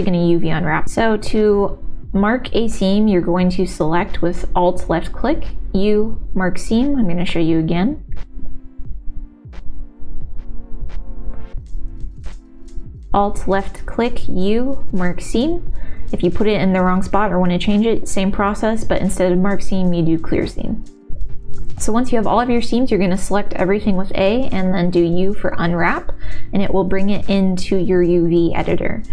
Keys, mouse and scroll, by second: 0.0 w, 0.2 alt+click, 3.4 u, 5.9 click, 9.3-10.8 shift+middle drag, 12.9 alt+click, 14.2 u, 15.8 click, 18.6 u, 20.4 click, 21.5 a, 23.1 u, 25.6-27.2 typing, 27.8 click, 28.3-29.1 typing.